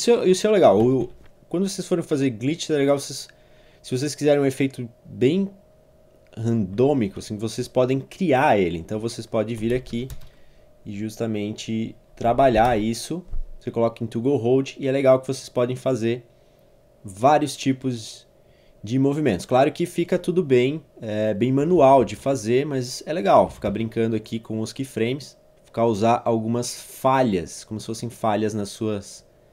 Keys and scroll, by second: 0.8 Page_Down, 6.7 Page_Down, 7.6 Page_Up, 9.4-10.3 typing, 12.3 typing, 12.7 Return, 21.8 ctrl+c, 22.0 ctrl+v.